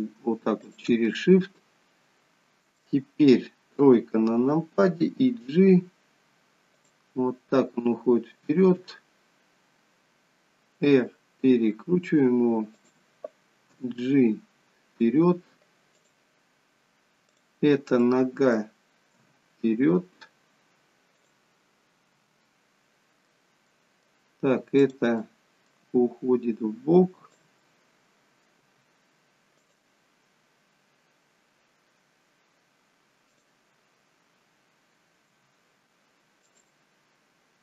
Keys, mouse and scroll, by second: 0.5 shift+click, 0.9 middle click, 3.7 KP_3, 5.1 g, 8.6 r, 13.7 g, 16.2 middle click, 17.2 click, 17.9 middle click, 19.1 g, 22.1 g, 22.5 middle click, 23.7 middle click, 24.8 click, 25.2 middle click, 25.9 g, 27.6 middle click, 28.6 g, 33.3 click, 35.8 w, 36.4 click.